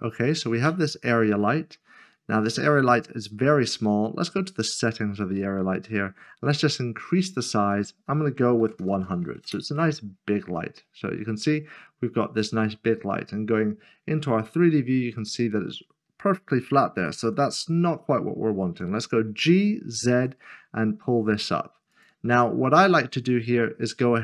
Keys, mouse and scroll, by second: 2.1 scroll up 1, 3.1 scroll down 1, 4.8 click, 8.6-8.9 typing, 9.4 Return, 10.8 scroll down 1, 11.9-12.7 scroll up 1, 12.9 middle click, 13.5-14.1 scroll down 1, 14.1 middle click, 20.1 typing, 21.9 click, 22.6-24.2 scroll down 1.